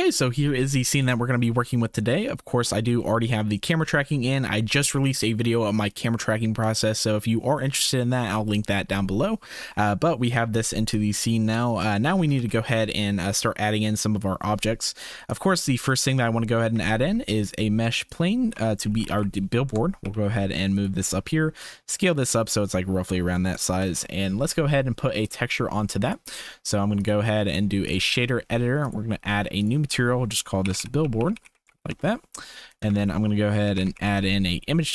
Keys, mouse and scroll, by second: 3.6-4.7 drag, 10.9-11.5 drag, 11.9 shift+click, 12.4 ctrl+s, 15.2 click, 16.7 shift+a, 18.5 r, 20.0 g, 21.0 s, 23.4 shift+click, 23.8 ctrl+s, 25.2-26.8 drag, 27.0-27.9 drag, 28.8-31.9 drag, 31.1 l, 32.7 click, 32.8 shift+a.